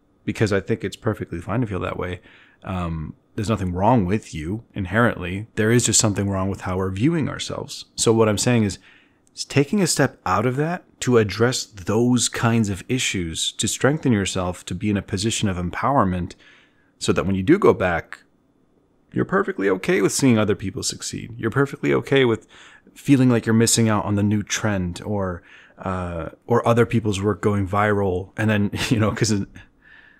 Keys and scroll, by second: 10.4 z.